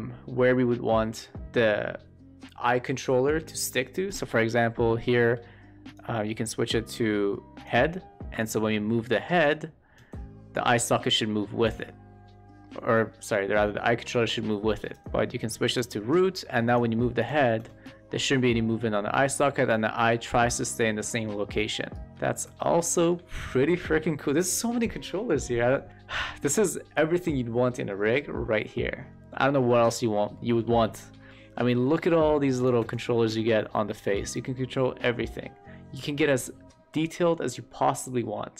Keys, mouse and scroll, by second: 4.9 shift+middle click, 5.9-7.9 drag, 9.9 e, 10.4-14.9 drag, 15.0 click, 17.2-17.5 drag, 17.5 e, 17.8-22.0 drag, 22.3 q, 22.8 middle drag, 29.4 shift+middle drag, 30.3 shift+middle drag, 30.9 shift+middle click, 31.2 middle click, 31.8 shift+middle drag, 32.9 w, 33.2-34.2 drag.